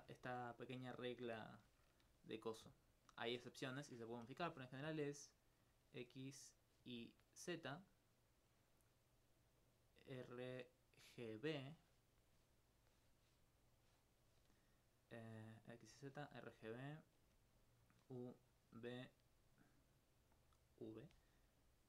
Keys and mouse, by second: 4.3 d, 4.8 d, 5.3 click, 5.7 click, 6.2 click, 6.6 click, 7.0 click, 8.3 click, 8.4 d, 9.6 click, 9.7 d, 9.9 d, 10.9 d, 12.8 click, 13.7 click, 17.7 click, 19.7 click, 21.7 click.